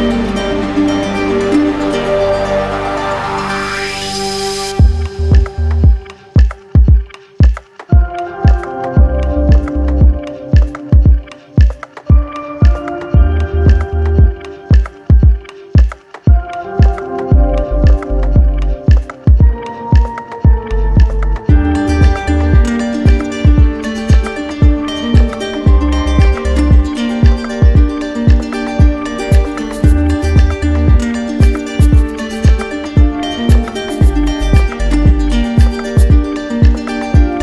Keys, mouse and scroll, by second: 0.6 right click, 2.5 z, 4.3 click, 5.0-6.1 right drag, 6.3-7.4 drag, 7.4-9.2 right drag, 14.8-15.6 scroll, 15.7 middle click, 16.1 middle click, 16.3 middle click, 19.8 middle click, 20.5 middle click, 20.6 click, 22.9 click, 30.0 alt+click, 31.3 right click, 32.2 right click, 34.4 alt+click, 34.6 ctrl+z.